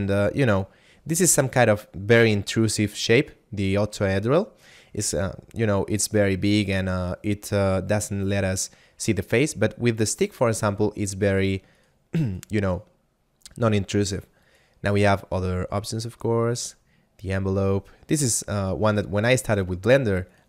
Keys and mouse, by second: 0.5 click, 10.1 click, 11.3 right click, 14.5 click, 16.6 click, 18.7 right click.